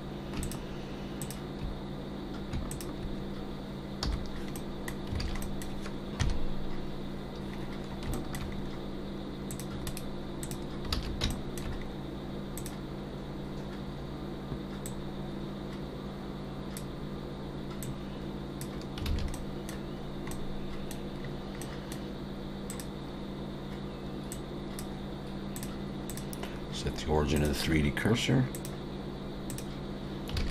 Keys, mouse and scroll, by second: 0.4 shift+click, 1.2 shift+click, 4.0 /, 4.5 middle click, 5.2 alt+a, 5.4 middle click, 6.2 KP_3, 7.5-9.3 scroll up 6, 8.1 shift+middle click, 9.3 scroll up 1, 9.5 click, 9.9 right click, 10.9 alt+a, 11.3 shift+middle click, 11.8-12.6 scroll up 2, 12.6 click, 14.8 click, 19.1 alt+a, 19.3 middle click, 19.9-20.5 scroll down 3, 20.3 middle click, 21.2-21.6 scroll down 3, 21.6 middle click, 22.7 click, 24.3 click, 28.5 click, 30.4 alt+a.